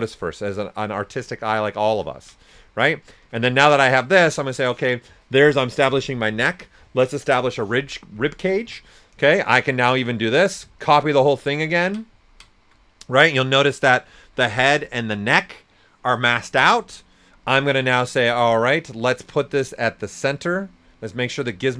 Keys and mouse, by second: 2.6-4.3 ctrl+right drag, 8.6 w, 8.9 right click, 10.1 alt+click, 10.8-12.2 ctrl+drag, 12.2 ctrl+right click, 17.8 right click, 17.8 typing, 18.8 x, 20.4 click.